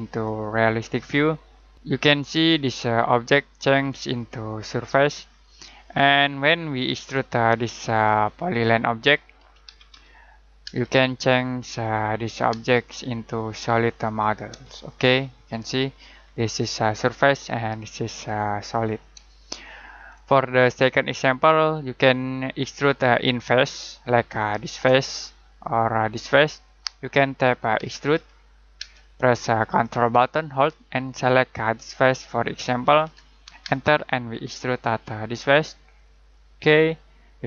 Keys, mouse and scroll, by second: 2.0 middle click, 6.5 middle click, 9.1-10.6 typing, 11.1 click, 12.5 space, 14.0 click, 14.7 shift+middle click, 19.3 middle click, 21.1-21.9 scroll up 1, 21.9 middle click, 27.4 e, 28.8 space, 31.9 ctrl+click, 33.6 space, 36.1 click.